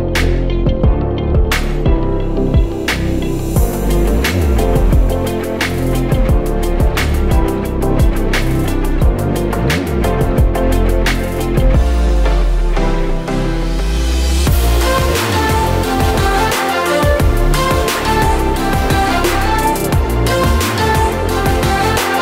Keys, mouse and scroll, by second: 7.7 ctrl+c, 9.5 click, 13.1 ctrl+v, 13.9 click, 20.4 ctrl+x, 21.4 ctrl+z.